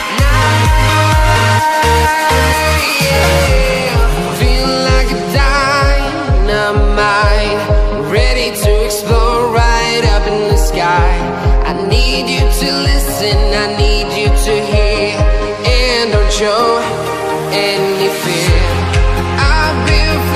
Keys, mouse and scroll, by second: 1.1 click, 1.7 j, 3.3 Tab, 3.9 a, 5.1 shift+Left, 5.7 c, 5.8 alt+Tab, 6.9 v, 7.7 Left, 7.9 Left, 8.0 l, 9.2 Left, 9.4 t, 9.5 Left, 10.3 Right, 10.5 a, 12.8 0, 13.4 scroll up 1, 14.8 click, 15.0-16.6 typing, 17.3 click, 17.5 ctrl+t, 18.7 click.